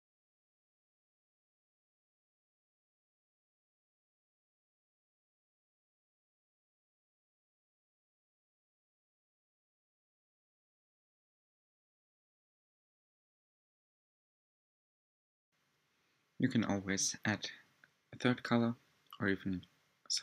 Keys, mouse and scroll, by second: 7.2-9.9 drag, 11.0 click, 15.4-15.7 drag, 16.1 click.